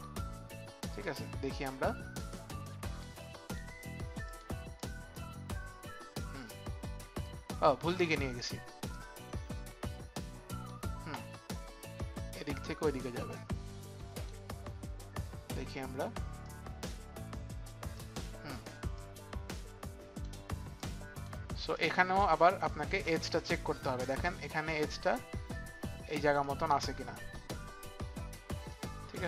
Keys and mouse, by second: 1.6 click, 3.1 click, 4.2 click, 4.8 click, 6.4 click, 8.9 click, 13.1 click, 16.4 click, 18.9 click, 18.9 click, 21.6 click, 21.8 click, 22.6 click, 26.4 click, 28.7 click.